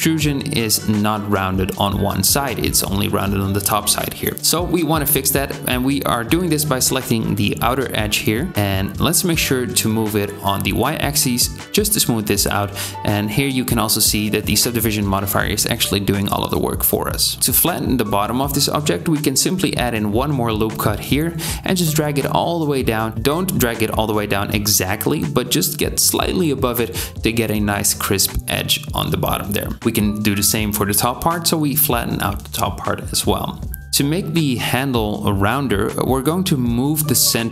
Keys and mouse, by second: 7.0 KP_7, 9.4 g, 14.8 Tab, 15.3-17.0 drag, 15.3-17.0 middle drag, 15.3-17.0 right drag, 17.4 ctrl+r, 30.0 ctrl+r, 33.9 Tab, 34.4-36.1 drag, 36.2 ctrl+drag, 36.6 KP_1, 37.3 g.